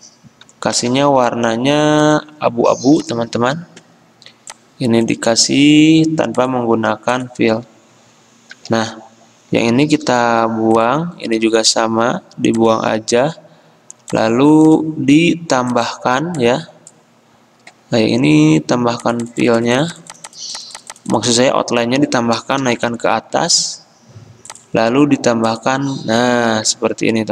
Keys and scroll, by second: 0.9 d, 5.5 d, 9.8 -.